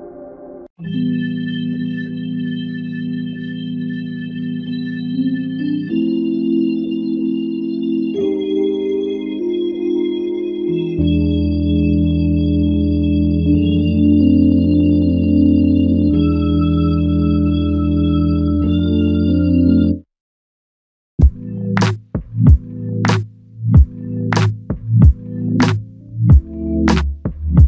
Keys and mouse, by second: 6.4 ctrl+alt+click, 11.2 alt+shift+click, 11.8 alt+click, 13.7 alt+click, 15.6 alt+click, 18.1 double click, 19.7 ctrl+click, 23.8 alt+click.